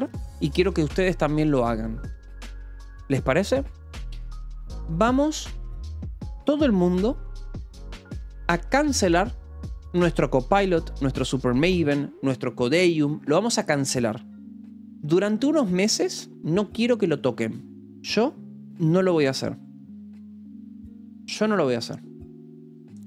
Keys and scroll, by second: 8.4 Return, 10.9 a.